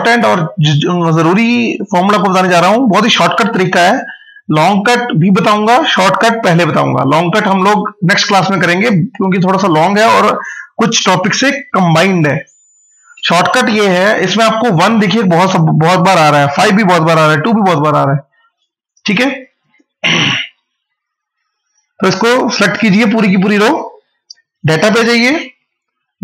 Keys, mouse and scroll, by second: 15.4 scroll down 1, 16.6 scroll up 1, 18.6 click, 22.7 click.